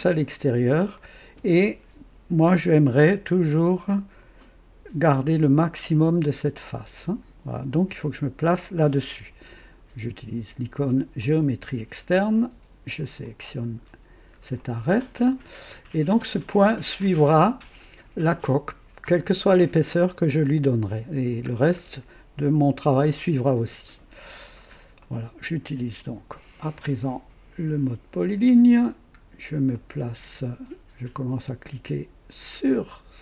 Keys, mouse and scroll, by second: 0.9 click, 1.9 KP_2, 11.1 click, 12.9 click, 13.8-14.3 scroll up 1, 14.5 right click, 21.4-21.8 scroll down 1, 22.9 right click, 23.7 scroll down 2, 24.4 scroll down 2, 25.0 right click, 28.0 click, 29.2 scroll down 2, 29.7 right click.